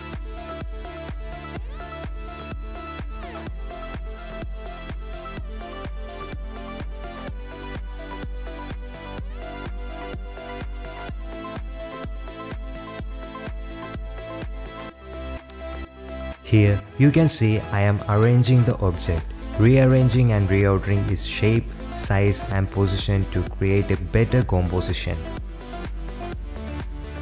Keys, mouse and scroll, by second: 0.6 r, 2.1 middle click, 3.4 click, 4.2 g, 8.6 click, 9.5 KP_7, 10.8 g, 13.1 g, 15.2 g, 17.0 drag, 17.2 middle click, 18.1 middle click, 18.5 shift+middle drag, 19.5 click, 20.7 click, 20.9 g, 21.4 middle click, 21.6 KP_7, 21.8 g, 22.7 click, 23.3 click, 23.6 s, 24.1 shift+d, 24.5 click, 25.1 g, 25.4 r, 25.9 click, 26.6-27.2 typing, 26.8 shift+click.